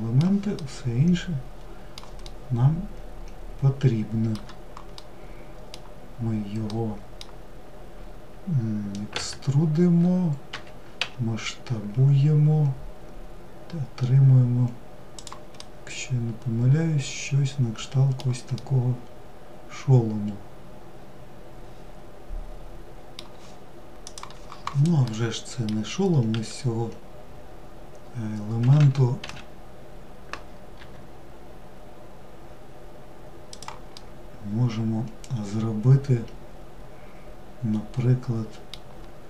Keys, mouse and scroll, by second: 8.3 e, 14.8-20.8 middle drag, 24.2-25.5 middle drag, 25.5 w, 33.2-36.2 middle drag.